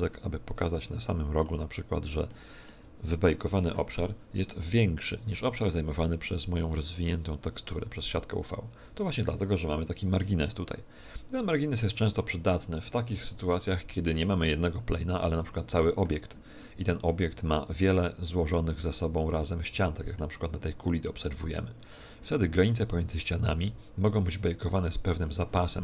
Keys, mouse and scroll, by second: 0.4-0.7 scroll up 4, 1.0 shift+middle click, 1.6 scroll up 2, 2.2 shift+middle click, 18.8-19.4 scroll up 7, 19.8 shift+middle click.